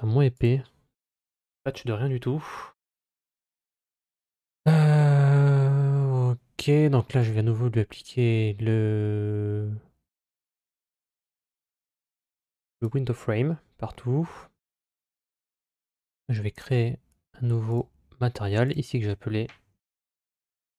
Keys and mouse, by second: 2.3 middle click, 7.0-12.7 drag, 16.4 click, 17.6 click, 18.5-20.7 drag.